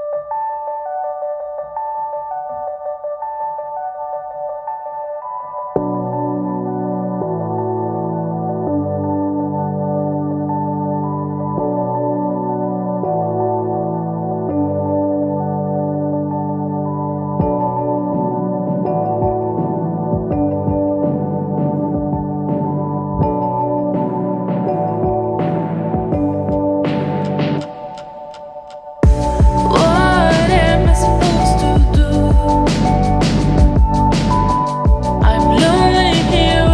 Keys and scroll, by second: 8.2 ctrl+t, 24.8 ctrl+t.